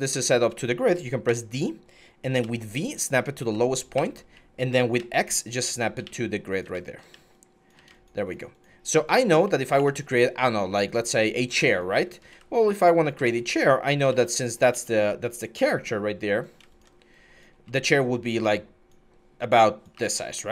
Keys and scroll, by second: 1.1 d, 2.2-3.8 typing, 4.8-7.7 typing, 9.6 q, 10.5 q, 12.1 w, 13.0 ctrl+z, 13.9 ctrl+z, 13.9 ctrl+x, 14.5 ctrl+z, 17.3 r, 19.7 w.